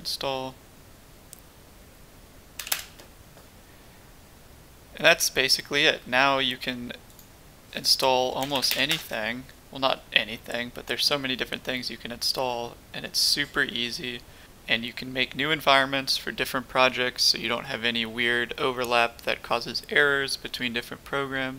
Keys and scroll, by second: 2.6 typing, 2.7 Return, 8.0-9.8 typing.